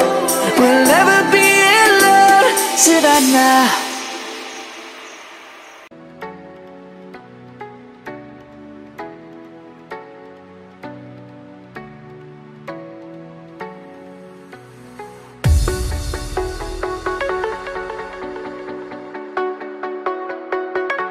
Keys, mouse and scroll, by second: 0.2 click, 1.1-4.0 typing, 5.9-7.3 typing, 8.5 click, 10.5 alt+click, 17.4-19.4 typing, 21.0-21.1 typing.